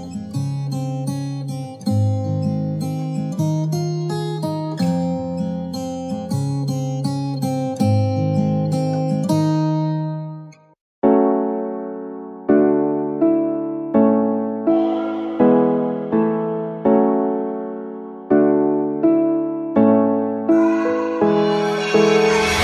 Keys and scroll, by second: 1.7 super+t, 11.4 Return, 13.1 shift+F5, 14.9 shift+super+d.